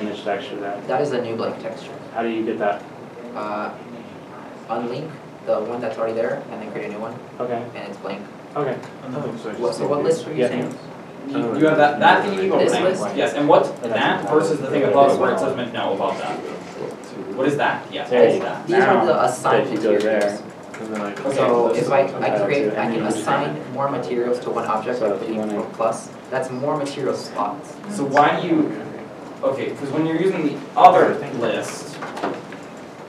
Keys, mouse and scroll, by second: 31.2 middle click, 31.2 Tab.